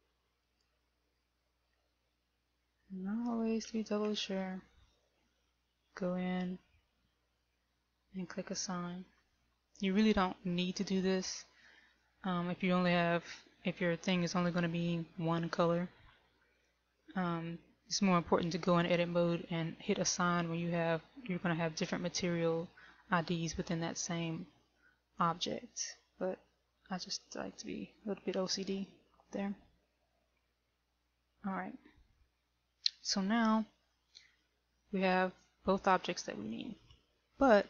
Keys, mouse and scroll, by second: 0.8 right click, 2.5 Tab, 4.2 a, 4.6 a, 7.7 click, 9.6 click, 29.3 Tab, 30.7 KP_1, 34.6 shift+middle click.